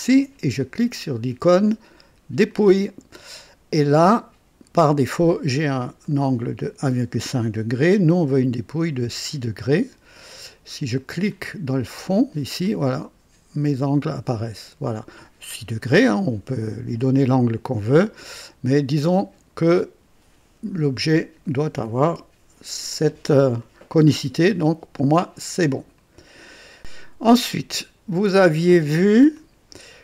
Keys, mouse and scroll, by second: 2.4 click, 3.8-5.4 drag, 6.0 click, 9.0 KP_6, 11.7 click, 12.6-18.0 drag, 18.2-21.6 drag, 23.0-23.8 drag, 24.6 click, 25.9 click, 28.2 click, 29.3 click, 29.7-30.0 drag.